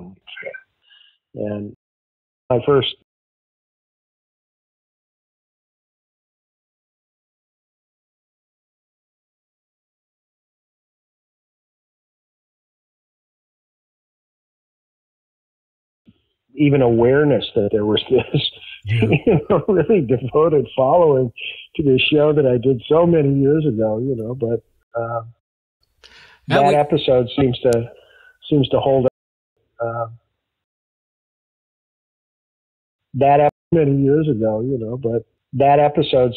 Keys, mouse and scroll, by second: 1.4 click, 1.5 click, 2.4 space, 2.9 space, 3.4 ctrl+s, 4.0 space, 16.0 space, 19.5 click, 20.9 click, 22.0-24.2 drag, 24.7 Delete, 25.8 space, 26.2 click, 27.0 click, 27.9 click, 28.5 click, 29.0 space, 29.4 click, 29.5 space, 30.5 space, 30.9 click, 32.6 ctrl+shift+Delete, 32.9 space, 33.4 space, 33.5 click, 33.6 space, 34.7 click, 36.0 click.